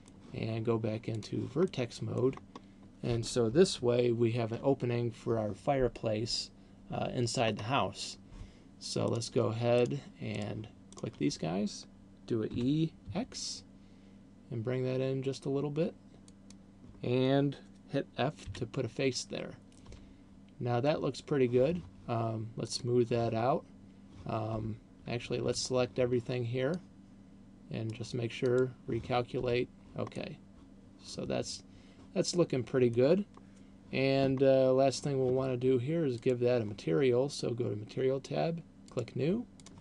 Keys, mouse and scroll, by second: 1.6 click, 1.9 middle click, 2.9 scroll up 1, 4.1-4.9 ctrl+KP_6, 7.9-9.1 scroll up 3, 9.1 right click, 10.1 shift+right click, 10.6 right click, 11.1 shift+right click, 12.9 e, 16.9 click, 18.6 f, 20.4 Tab, 22.9 click, 23.6-24.1 scroll down 2, 24.6 Tab, 25.4 a, 25.6 a, 27.1 click, 28.6 click, 29.6 Tab, 30.4 middle click, 34.9-36.6 scroll down 1, 36.6 click, 39.1 click.